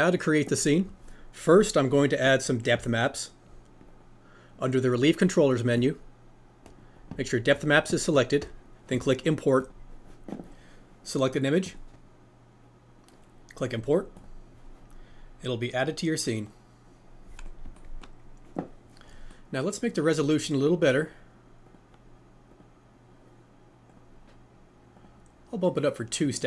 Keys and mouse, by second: 5.8 click, 6.9 click, 9.6 click, 19.3 middle click, 21.7 click, 22.5 click, 24.0-26.4 drag.